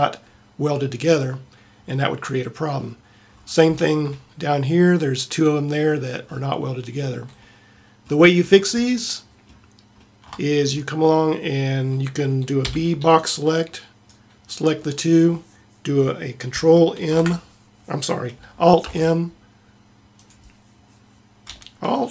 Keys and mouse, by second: 1.2-3.8 middle drag, 6.4-7.6 middle drag, 9.1 middle click, 10.8-12.7 middle drag, 12.7 b, 17.2 ctrl+m.